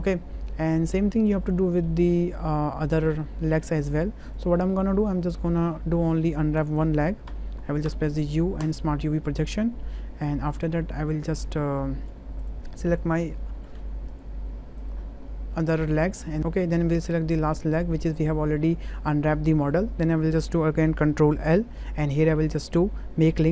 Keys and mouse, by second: 0.0 Tab, 0.0 click, 0.5 drag, 1.6 drag, 2.0 shift+middle drag, 2.4-3.2 middle drag, 3.6 middle click, 4.3 click, 4.5 middle click, 5.0 shift+middle click, 5.8 shift+middle click, 6.6 Tab, 7.3 a, 7.9 u, 11.1 Tab, 12.4 drag, 12.9 shift+drag, 14.1 shift+click, 14.8 shift+click, 15.2 middle click, 15.9 shift+click, 16.3 middle click, 21.4 ctrl+l.